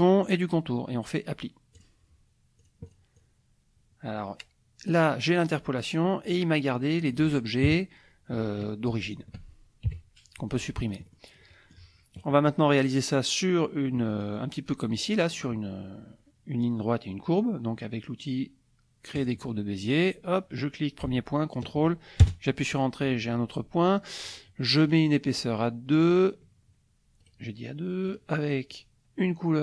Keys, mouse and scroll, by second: 1.8 click, 2.6-3.1 drag, 3.2-6.0 drag, 6.2 click, 6.9 click, 7.7 KP_Subtract, 9.0 shift+click, 10.7-11.3 drag, 11.4 click, 14.0 click, 15.2 click, 19.2 click, 19.8 click, 21.5 ctrl+click, 22.2 ctrl+Return, 24.8 right click, 25.9 click, 27.2 right click, 28.1 click.